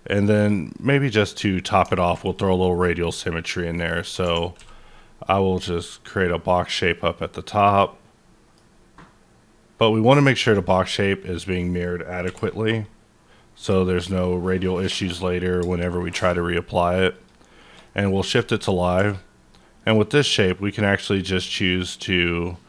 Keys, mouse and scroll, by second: 0.3 click, 0.7 click, 1.3-3.5 middle drag, 2.3 click, 3.4-5.9 drag, 5.9-10.4 drag, 7.6-12.2 middle drag, 10.4 1, 12.2 b, 13.2-13.6 scroll down 2, 13.6-15.0 scroll down 7, 15.0 click, 17.1 shift+click, 17.8-21.2 shift+middle drag, 18.9 q.